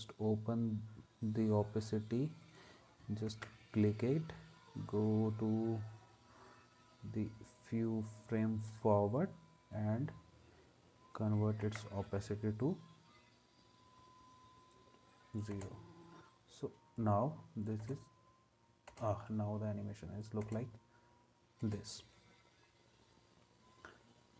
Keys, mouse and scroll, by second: 3.3 ctrl+s, 11.6 ctrl+s, 15.5 space, 17.8 space, 18.9 space, 20.4 space, 21.6 space.